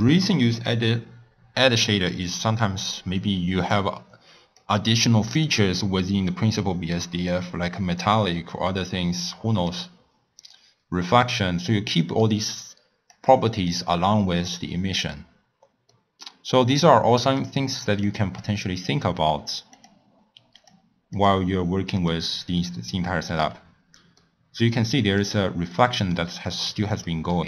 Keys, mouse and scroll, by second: 4.6-11.2 drag, 11.2-14.4 middle drag, 14.4 click, 15.3-15.8 scroll down 2, 15.8-17.2 middle drag, 17.2 click, 18.0 click, 20.5 click, 21.1 click, 21.9 click, 22.4-22.8 scroll down 2, 22.8-23.4 middle drag, 23.4-24.1 scroll up 6, 24.1-27.4 middle drag.